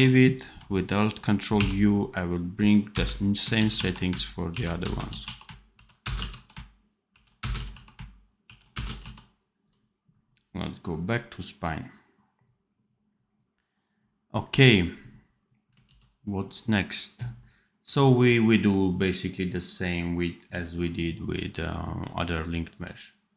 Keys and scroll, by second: 15.8 ctrl+s.